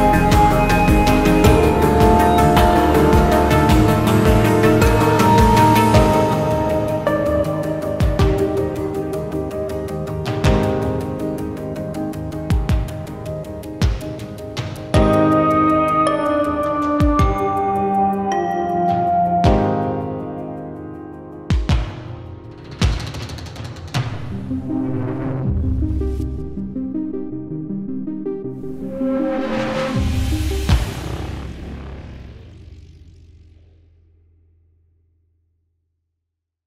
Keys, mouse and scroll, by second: 0.8 alt+middle click, 1.3 alt+click, 4.5 shift+right click, 30.7-31.5 typing, 31.5 Return, 34.1-34.9 typing, 35.1 Return.